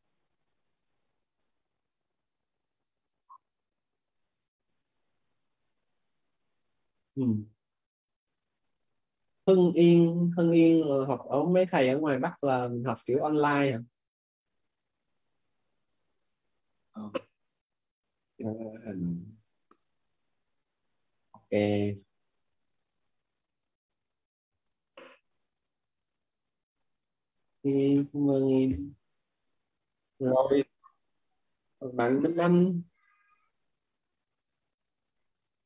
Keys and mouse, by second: 1.7 click, 19.5 click, 22.2 click, 24.7-28.2 typing, 29.5 click.